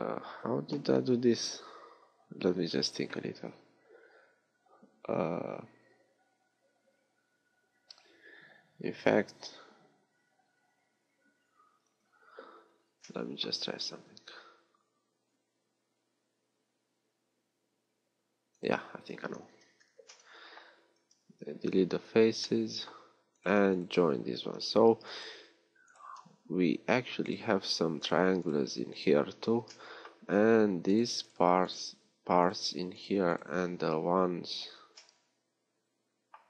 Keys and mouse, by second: 19.8 ctrl+z, 21.2 x, 26.5 f, 27.8 f, 29.6 f, 30.4-32.1 middle drag, 32.1 f, 33.8 f, 35.2-36.4 drag.